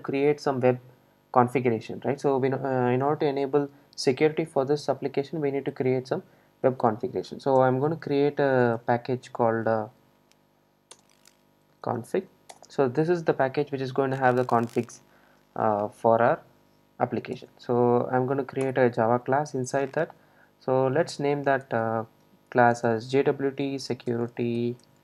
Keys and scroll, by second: 7.7 super+n.